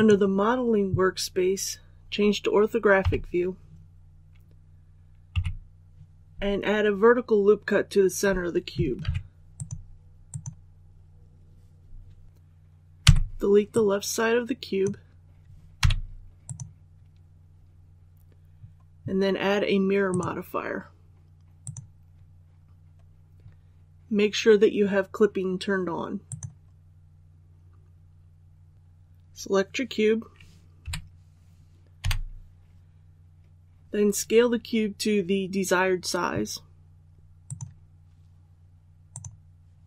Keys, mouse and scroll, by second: 2.9 KP_5, 9.4 click, 12.2 scroll down 1, 12.9 b, 13.6 click, 15.7 x, 16.3 click, 30.7 3, 31.9 i, 37.3 click.